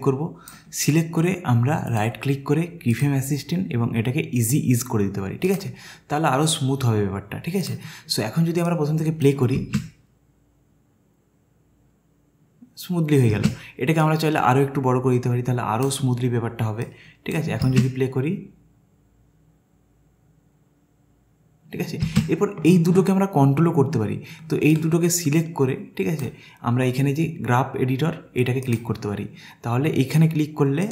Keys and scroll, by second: 9.6 space, 13.3 space, 17.6 space, 22.1 space.